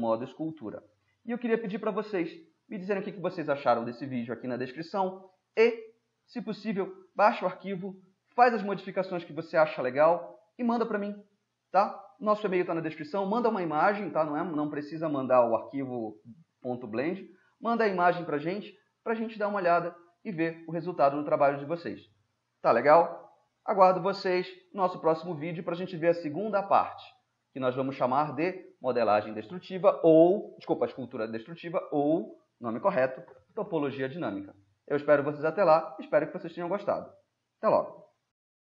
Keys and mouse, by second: 9.4-13.8 middle drag, 15.7-19.1 middle drag, 20.4-26.0 middle drag.